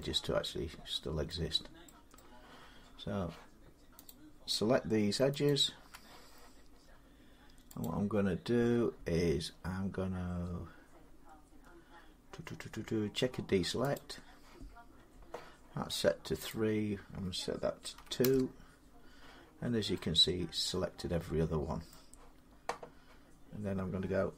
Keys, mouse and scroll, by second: 1.1 middle click, 2.0 middle click, 3.9 click, 5.3 alt+click, 7.7 click, 11.1-12.7 drag, 13.8 click, 16.3 click, 17.8 2, 18.1 Return, 21.7-24.3 middle drag.